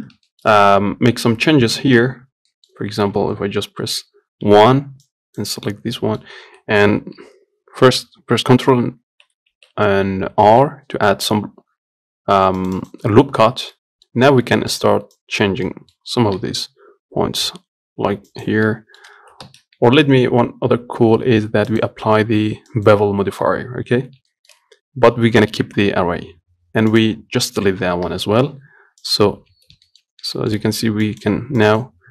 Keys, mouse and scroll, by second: 0.0 Tab, 0.6 shift+middle click, 1.0 Tab, 2.8 middle click, 3.0 Tab, 4.7 1, 5.3 click, 6.2-9.8 middle drag, 9.8 ctrl+r, 14.0 middle click, 14.6 scroll up 1, 14.8 shift+middle click, 15.4 click, 15.9 middle click, 16.7 g, 19.0 middle click, 19.7 ctrl+z, 20.2 Tab, 22.0-24.6 drag, 24.6-27.2 shift+middle drag, 27.2 click, 28.4 Delete, 29.3 click, 29.7 Tab, 30.1 shift+middle click, 30.4 scroll up 2, 30.7 shift+middle click, 31.3 click, 31.9 click.